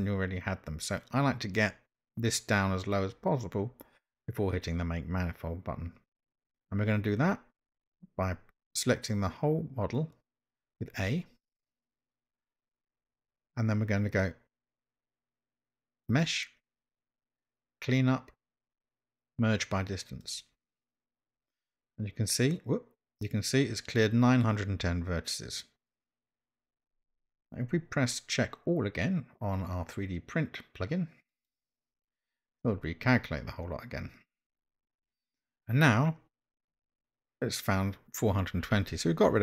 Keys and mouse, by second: 11.1 a, 16.0-20.9 drag, 31.3-34.4 drag.